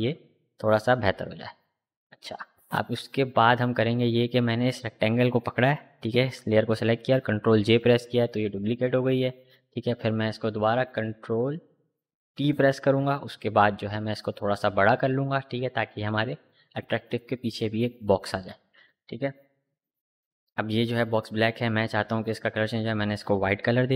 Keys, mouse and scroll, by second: 1.3 click, 4.4 click, 5.6 ctrl+j, 7.3-11.9 drag, 11.9 ctrl+t, 13.3-17.1 alt+drag, 17.1 Up, 20.9-23.7 drag.